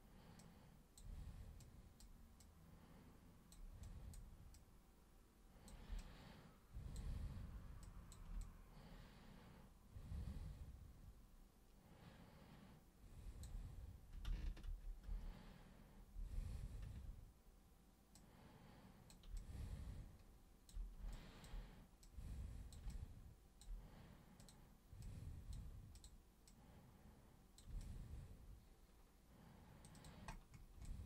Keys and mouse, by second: 0.4 super+click, 1.6 super+click, 2.4-3.5 super+drag, 3.8 super+click, 4.5-5.6 super+drag, 6.0-7.0 alt+super+drag, 7.8 super+click, 8.4-13.4 alt+super+drag, 14.2 ctrl+super+z, 14.6 ctrl+super+z, 15.1 ctrl+super+z, 16.1 ctrl+super+z, 18.1-19.0 super+drag, 19.3-20.6 alt+super+drag, 21.1-21.4 alt+super+drag, 22.0 super+click, 22.9-23.6 alt+super+drag, 24.4 super+click, 25.0 super+click, 25.9 super+click, 26.5 super+click, 27.8-29.8 alt+super+drag, 29.9 alt+super+click, 30.8 alt+super+click.